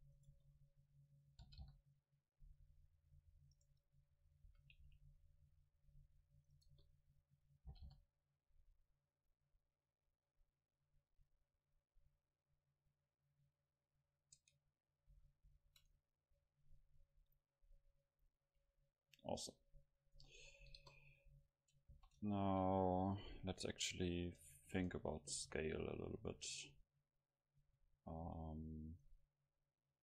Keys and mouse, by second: 0.3-2.0 drag, 0.4 KP_0, 1.5 g, 3.7 right click, 4.0-5.4 middle drag, 4.5 a, 4.9 c, 6.7 KP_0, 7.7 g, 7.8 right click, 14.4 Tab, 14.7-17.4 drag, 15.2 a, 15.5 a, 16.0-18.2 middle drag, 20.8 KP_0, 22.0 ctrl+s, 24.9 shift+a, 29.0-30.0 drag.